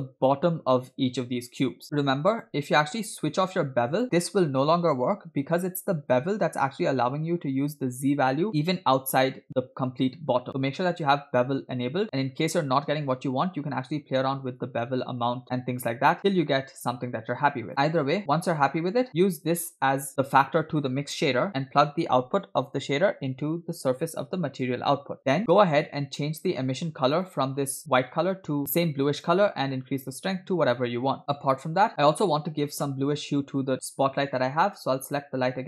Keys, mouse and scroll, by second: 2.4 click, 4.0-5.6 drag, 7.4-8.3 scroll up 2, 11.1 click, 14.6-17.7 shift+drag, 17.7 scroll down 4, 18.4 middle click, 18.8 scroll up 2, 19.3-20.7 drag, 23.3 click, 25.0 click, 25.2 scroll down 2, 25.4 scroll down 3, 26.2 middle click, 26.6-26.9 scroll up 1, 27.2 click, 30.4 click, 31.9-32.3 scroll down 2, 32.9-33.3 shift+middle drag, 35.1 click.